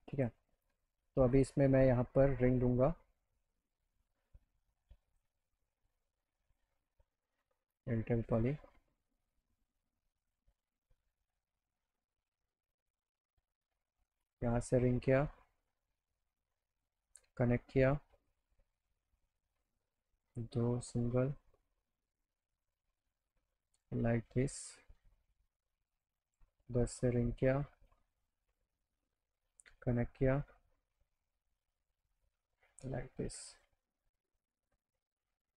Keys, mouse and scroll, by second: 0.2 click, 1.3 click, 5.1 click, 6.5 click, 7.6 e, 8.3 click, 10.3 click, 11.6 click, 12.9 click, 14.1 click, 14.5 right click, 17.1 click, 19.6 click, 21.6-23.7 drag, 24.7 click, 25.9 click, 27.8 click, 28.5 right click, 29.9 click, 32.1 click, 33.6 click, 34.6 click.